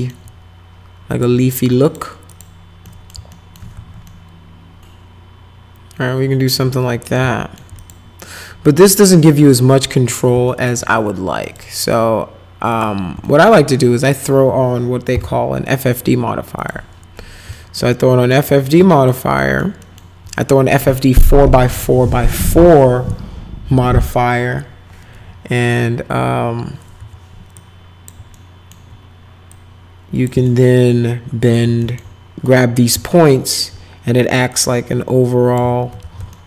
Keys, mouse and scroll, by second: 1.1 click, 1.8 ctrl+click, 2.3 ctrl+click, 2.9 middle click, 3.3 alt+middle click, 3.7 alt+q, 4.1-6.5 alt+middle drag, 7.2 alt+middle click, 7.8 click, 8.9 click, 10.5 alt+middle click, 11.4 right click, 12.7 click, 13.3 alt+middle click, 14.0 click, 15.1 f, 16.6 click, 17.5 alt+middle click, 18.5 middle click, 18.9 alt+middle click, 19.4 alt+middle click, 19.8 alt+middle click, 27.0 1, 27.6 click, 28.4 alt+middle click, 29.5 click, 30.5-31.6 alt+right drag, 31.8 alt+right click, 32.4 middle click, 33.1 alt+right click, 34.5-35.6 drag, 36.0 ctrl+z, 36.3 alt+right click.